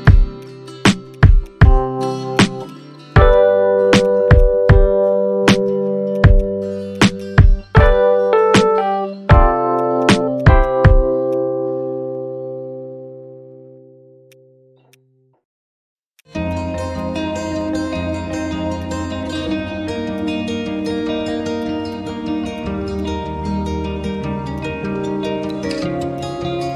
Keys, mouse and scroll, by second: 8.0-8.3 scroll down 1, 8.7 scroll up 1, 10.1 double click, 11.5-11.9 scroll down 1, 12.0 alt+middle click, 13.7-14.1 scroll down 1, 14.1-14.4 scroll up 1, 14.9 alt+click, 16.1 shift+click, 16.4 right click, 18.1 scroll up 1, 18.8 alt+click, 19.7-20.1 scroll down 1, 20.8 right click, 23.7-24.1 scroll up 1, 24.1 scroll down 1, 24.7 scroll up 1, 25.4 alt+click, 26.6 alt+middle click.